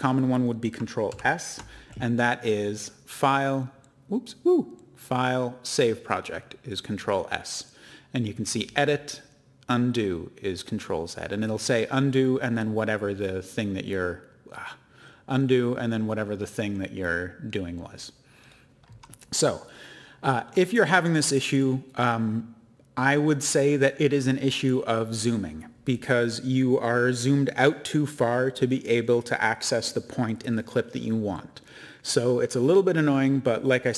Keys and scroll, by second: 1.1 ctrl+s.